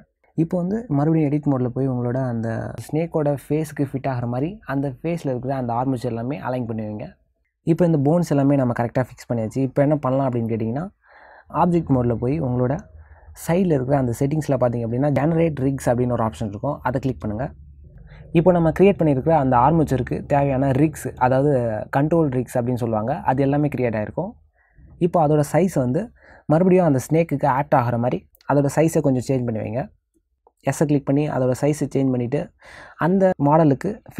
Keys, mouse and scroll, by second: 0.5 middle click, 0.7 click, 1.2 ctrl+z, 1.4 click, 2.6 click, 3.0 click, 4.0 click, 4.1 click, 4.7 click, 4.9 click, 5.4 ctrl+z, 5.8 middle click, 7.8 ctrl+middle click, 9.0 middle click, 11.3 click, 13.2 middle click, 17.6 click, 18.4 middle click, 20.5 middle click, 32.8 middle click.